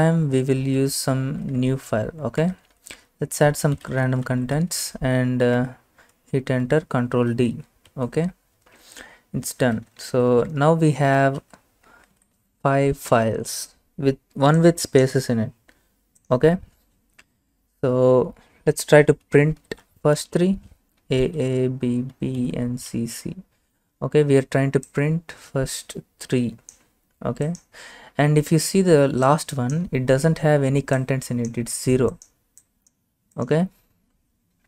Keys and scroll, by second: 0.0-1.2 typing, 1.6 Right, 2.5 Return, 3.6-6.1 typing, 6.7 ctrl+d, 9.4-13.1 typing, 12.2 Right, 19.3-23.6 typing.